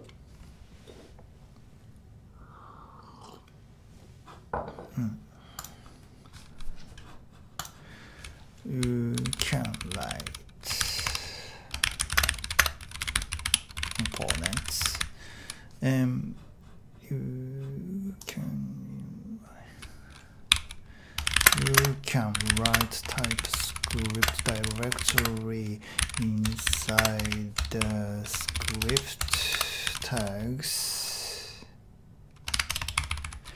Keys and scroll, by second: 8.8-15.8 typing, 20.5-30.6 typing, 32.7 Return, 32.8 Return, 32.9 `, 33.1 `, 33.2 `.